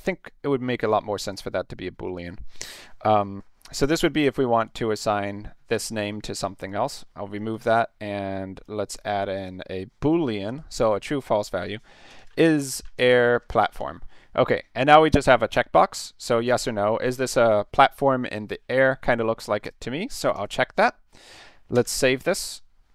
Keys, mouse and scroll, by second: 1.2 click, 2.1 click, 2.7 click, 7.4 click, 8.6 click, 9.4 click, 10.5 click, 11.4 click, 11.8-14.2 typing, 19.6 click, 20.3 click.